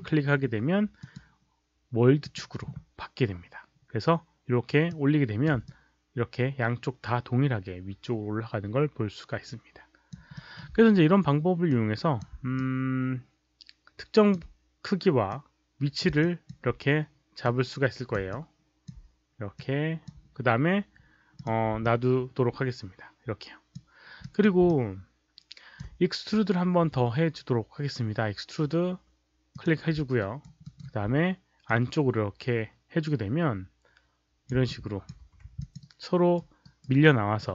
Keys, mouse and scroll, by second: 0.9 click, 2.1 click, 4.8 click, 5.6-10.0 alt+drag, 10.3 alt+middle click, 11.6 click, 12.5-14.2 alt+drag, 15.2 click, 16.1 alt+click, 17.3 click, 18.3-18.8 alt+drag, 19.5 click, 21.3 click, 21.8-23.7 alt+drag, 24.1 drag, 24.6-25.7 alt+drag, 29.4 click, 30.2 alt+right click, 30.5 alt+middle click, 30.7 alt+click, 31.6-34.4 drag, 34.0 alt+middle click, 34.0 alt+right click, 34.6 alt+click, 34.6 alt+middle click, 34.6 alt+right click, 35.1 4, 35.5 alt+click, 35.7 alt+right click, 36.5 alt+right click, 36.9 alt+middle click.